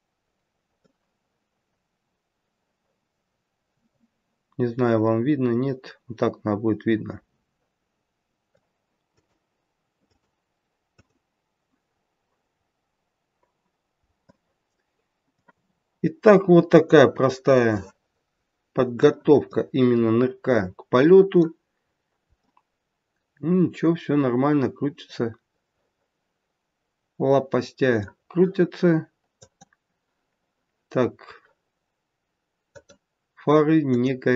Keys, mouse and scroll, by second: 0.7 middle click, 0.7-1.1 scroll down 1, 8.5 click, 14.2 middle click, 16.6 click, 17.7 middle click, 19.4 middle click, 21.8-22.4 scroll up 1, 22.4 middle click, 29.6 click, 32.7 click, 33.9 click.